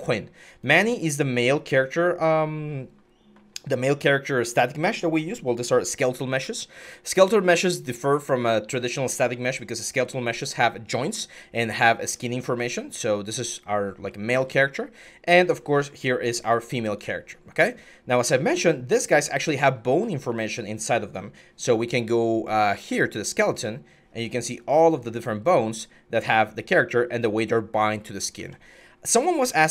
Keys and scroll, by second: 11.9-14.3 typing, 28.1 ctrl+z, 29.3-29.7 typing.